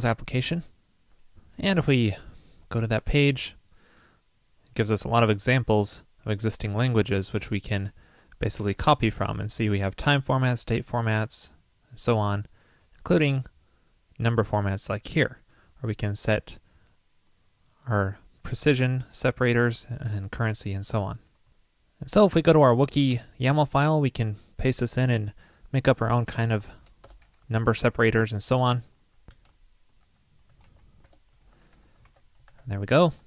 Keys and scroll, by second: 1.7 super+v, 23.1 super+v, 30.7 super+x, 31.5 alt+Left, 32.1 super+v, 32.4 super+s.